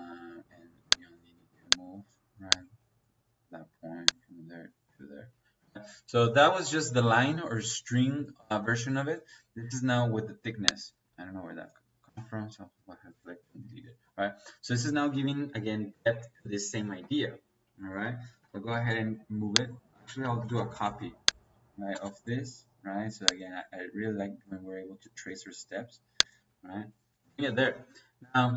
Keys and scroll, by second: 0.3 Escape, 4.7 Escape, 12.0 Delete, 17.8 Escape, 18.4-18.8 typing, 19.7 Escape, 20.2-21.8 typing, 26.3 Escape.